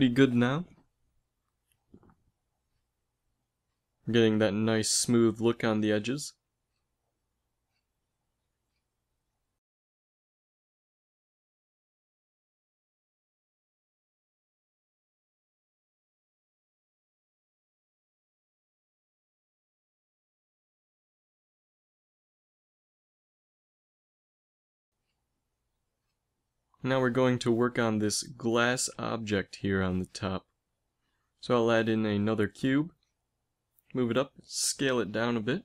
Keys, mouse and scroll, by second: 3.9 ctrl+r, 7.0 ctrl+r, 12.9 a, 13.4 Tab, 14.3 a, 15.4 ctrl+s, 31.0 shift+a, 33.4 g, 34.8 s.